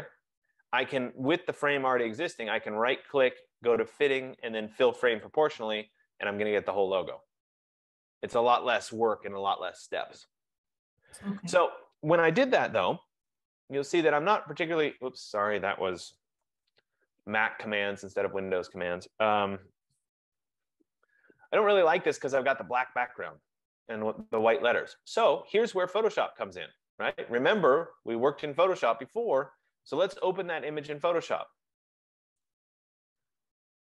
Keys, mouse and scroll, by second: 2.6 right click, 5.3 click, 6.8 F15, 13.1 super+=, 16.9 super+=, 16.9 super+-, 20.1 ctrl+=, 20.4 ctrl+=, 20.9 ctrl+=, 25.9 click, 30.9 click, 32.6 click.